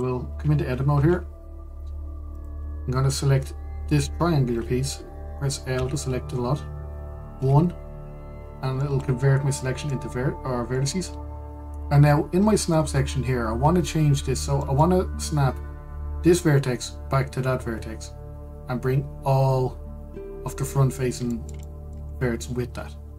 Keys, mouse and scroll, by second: 0.2 click, 0.5 click, 1.6 Tab, 3.0-6.1 drag, 6.4 l, 8.0 1, 9.5-11.9 middle drag, 11.9-15.0 scroll up 1, 15.3-18.4 middle drag, 21.6-22.0 scroll down 1, 22.0 shift+middle click, 22.8-23.1 scroll up 2.